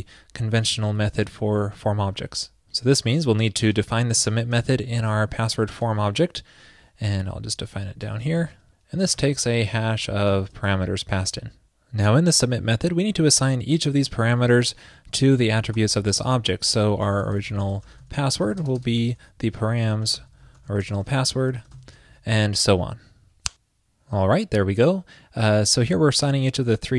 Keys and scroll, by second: 4.2 super+c, 4.5 super+s, 19.2 ctrl+p.